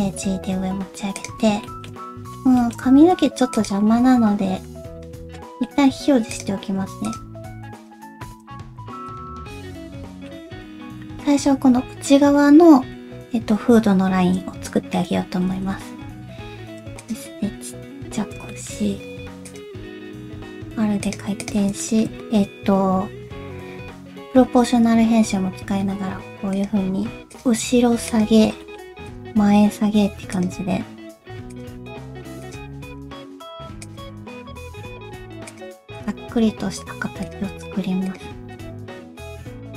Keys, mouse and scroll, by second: 1.6 shift+middle click, 2.0-2.4 scroll up 2, 2.6 shift+middle click, 2.9 s, 4.9 Tab, 5.4 middle click, 6.3 click, 7.0 shift+click, 7.7 shift+click, 8.7 h, 9.0 click, 9.5 middle click, 10.6 alt+z, 15.5 alt+z, 16.1 s, 17.7 KP_3, 18.5 shift+middle click, 19.0 r, 19.7 g, 21.4 click, 21.8 shift+middle click, 24.5 g, 27.6 g, 28.6 shift+middle click, 29.0 click, 29.3 g, 30.7 r, 31.8 g, 32.9 click, 33.2 g, 34.3 click, 34.5 g, 35.9 click, 36.2 g, 38.1 click, 38.2 g, 39.0 click, 39.1 g.